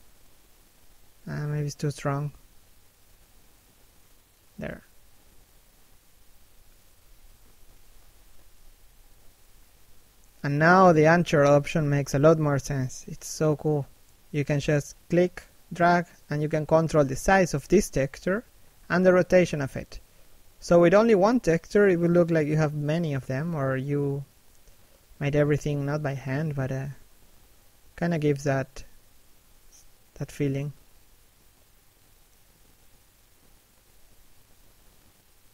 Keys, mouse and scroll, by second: 0.3 middle click, 3.3 middle click, 3.9 click, 6.9 middle click, 7.5 shift+middle click, 7.8 middle click, 8.3 shift+middle click, 8.5 middle click, 9.0 click, 11.1 middle click, 13.3 click, 16.3 scroll down 1, 16.5 middle click, 17.7-18.3 scroll up 1, 18.3 click, 20.1 middle click, 21.3 shift+middle click, 21.6 middle click, 22.0 shift+middle click, 22.3 scroll up 1, 22.8 click, 25.4 scroll down 1, 25.5 middle click, 27.1 shift+middle click, 27.4 middle click, 27.7 scroll up 1, 28.1 click, 30.4 middle click, 31.4 click, 33.6 scroll down 1, 33.8 middle click, 34.8-35.3 scroll up 1, 35.3 click.